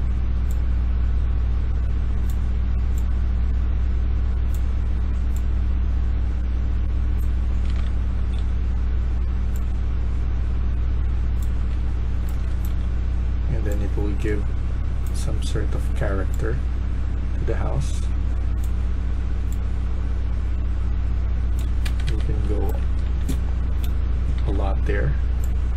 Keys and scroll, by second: 7.3-8.2 typing, 11.3-13.1 typing, 21.7 Escape, 22.0 Escape, 22.1-24.2 typing.